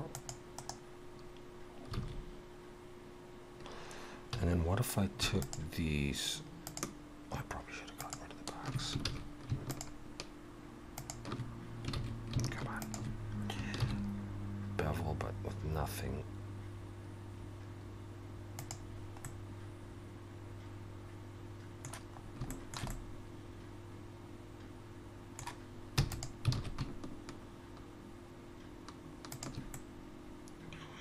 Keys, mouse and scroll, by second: 2.0 alt+a, 4.3 2, 5.4 alt+shift+click, 9.1 ctrl+z, 9.7 alt+shift+click, 12.0 ctrl+z, 12.8 alt+shift+click, 13.8 ctrl+b, 22.2 scroll up 2, 22.5 shift+middle click, 22.9 middle click, 26.5 alt+s, 29.7 middle click.